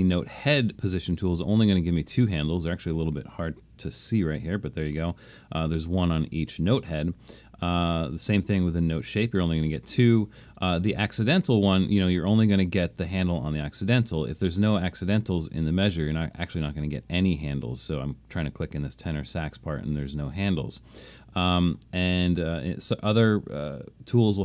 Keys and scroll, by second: 3.9 super+=.